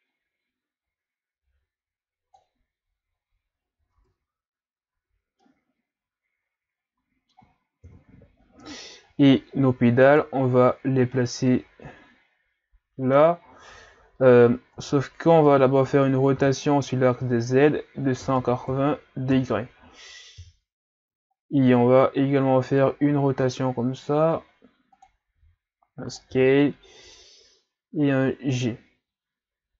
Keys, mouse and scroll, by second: 2.9-3.8 scroll down 1, 3.8 scroll down 1, 3.9 Tab, 4.9 a, 5.4-7.8 middle drag, 7.8 KP_3, 10.1 right click, 10.6-11.1 ctrl+scroll up 3, 11.1-14.5 middle drag, 14.8 Tab, 15.4 Tab, 16.4 r, 20.4 KP_3, 21.3-22.1 shift+scroll up 3, 22.1-22.5 scroll up 1, 23.3 r, 25.4 s, 26.3 g.